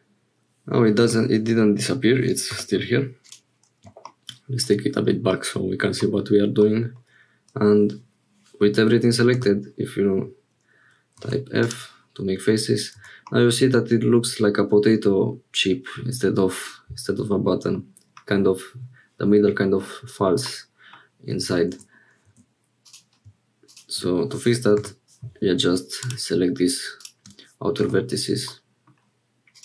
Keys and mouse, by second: 1.0 g, 4.5 shift+middle click, 5.3 middle click, 6.6 middle click, 9.4 f, 11.1 1, 12.9 Tab, 13.2-16.0 middle drag, 16.0-17.8 drag, 20.4 click, 21.7 Tab, 22.2 1, 24.8 j, 26.0 click, 28.5 click, 29.5 click.